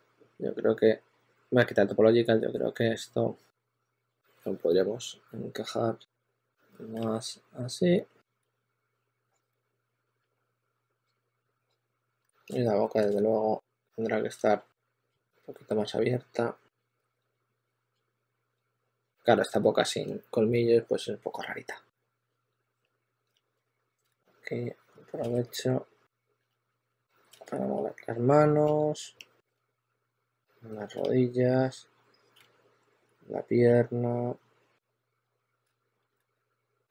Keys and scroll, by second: 0.7 typing, 4.4-4.9 typing, 6.8 typing, 8.0-10.1 typing, 12.1 shift+f, 14.6-15.5 typing, 16.6-18.5 typing, 20.4 s, 23.0-24.2 typing, 25.0 super+z, 25.3-27.2 typing, 29.4 s, 30.8 s, 32.2 s, 35.6 super+z, 35.9-36.7 typing.